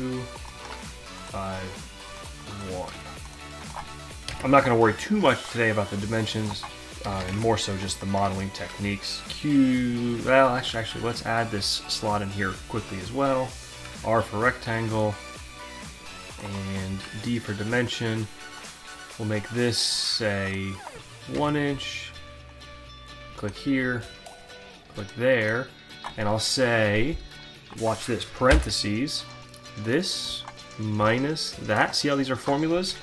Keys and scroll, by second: 3.9 Return, 7.1 Delete, 7.2 5, 7.3 Return, 10.8 alt+Tab, 13.9 r, 16.9 d, 21.0 Return, 28.0 shift+9, 31.0 -.